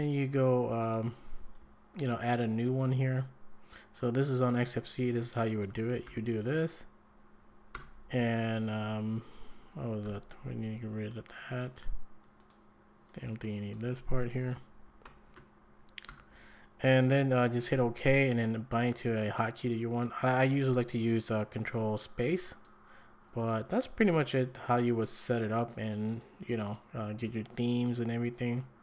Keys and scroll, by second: 6.0 ctrl+v, 7.7 BackSpace, 10.0 BackSpace, 14.7 Left, 15.6 Right, 16.1 BackSpace.